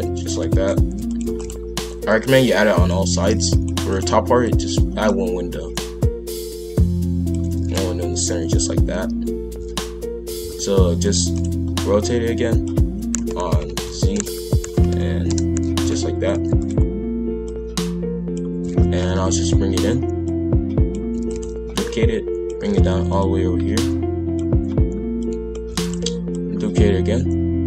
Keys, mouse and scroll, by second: 0.1 shift+f, 1.2 shift+d, 2.0 click, 3.1 shift+f, 3.7 shift+d, 4.4 click, 6.0 click, 7.5 shift+f, 11.2 shift+d, 12.0 click, 12.8 r, 14.3 r, 15.7 shift+f, 17.4 click, 18.7 shift+f, 20.2 click, 21.2 shift+d, 21.7 click, 22.6 shift+f, 23.8 click, 25.2 click, 25.7 shift+d, 26.3 click.